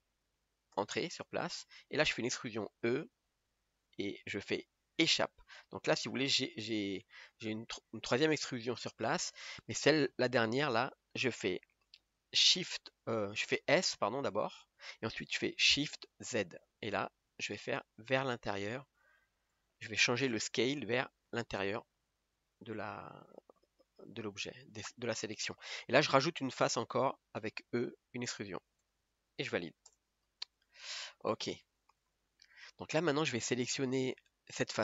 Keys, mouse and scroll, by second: 2.8 e, 8.4 g, 22.1-22.5 scroll down 1, 22.5-26.1 middle drag, 26.1-28.8 scroll up 1, 28.8 e, 30.5 scroll down 1, 32.1 KP_1, 34.1 click.